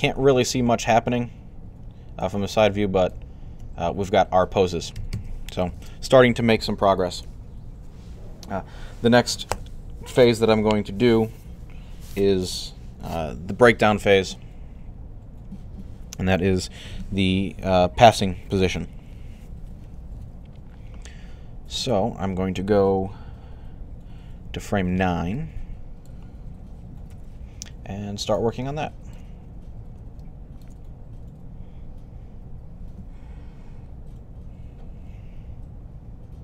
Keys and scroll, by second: 4.9 alt+a, 5.6 Left, 26.9 3.